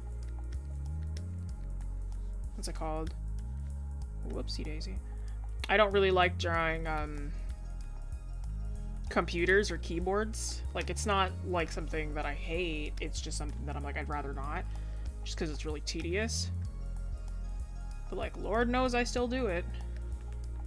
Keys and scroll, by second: 12.7 scroll, 14.9 scroll, 20.3 scroll down 1.